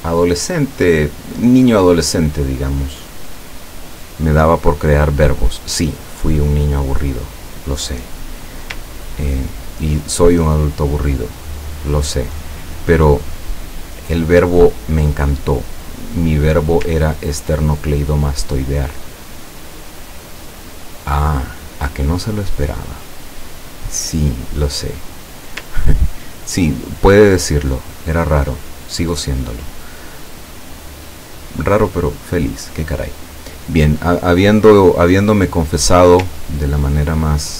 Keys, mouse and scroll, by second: 1.9 click, 5.7 click, 9.0-10.2 ctrl+drag, 19.8-21.8 ctrl+drag, 23.5 click, 25.2 click, 25.7-28.8 ctrl+drag, 34.3 click, 36.7 ctrl+click.